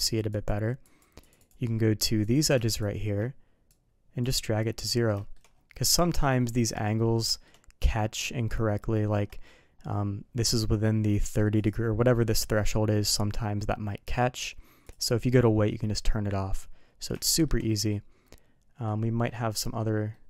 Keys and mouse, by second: 0.3 click, 0.8 click, 1.2 click, 1.4 click, 2.3 click, 2.7 shift+click, 3.7 click, 4.6 middle click, 5.2 shift+middle click, 5.9-6.3 middle drag, 7.0 middle click, 7.3 shift+middle click, 11.1 click, 14.4 click, 17.2 shift+middle click, 17.7 middle click, 18.2 middle click, 19.3 middle click, 20.1 middle click.